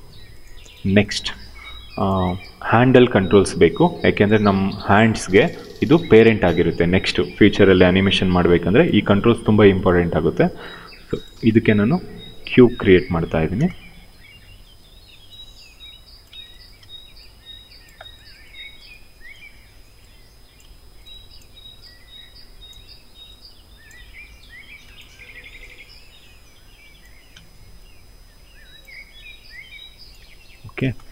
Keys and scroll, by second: 9.9 w, 11.1 space, 13.1 f, 13.2 space, 13.9 w, 15.1 r, 16.4 w, 18.9 r, 20.2 w, 22.4 r, 24.7 r, 27.0 w, 29.8-31.1 typing.